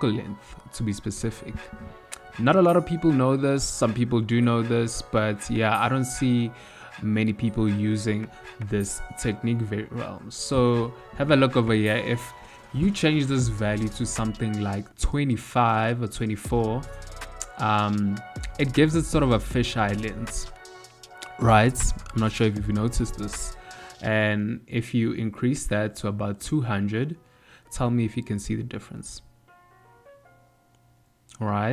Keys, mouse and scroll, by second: 1.2 ctrl+middle click, 2.6 shift+middle click, 3.8 n, 4.7 click, 5.1 n, 6.1 ctrl+middle click, 6.8 shift+middle click, 7.8 n, 8.6 click, 9.0 n, 11.6 click, 17.4 ctrl+middle click, 18.9 middle click, 23.8 click, 25.4 KP_0, 27.3 ctrl+middle click.